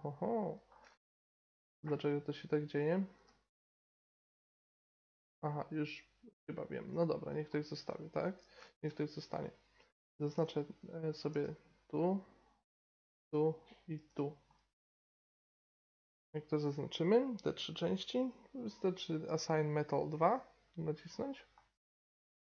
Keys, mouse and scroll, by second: 1.8 g, 3.3 g, 7.3 middle click, 8.4-9.5 middle drag, 9.5-11.3 right drag, 11.3 l, 13.2 l, 14.1 l, 14.5 middle click, 15.0 middle click, 18.6-21.5 drag, 21.5-22.4 middle drag.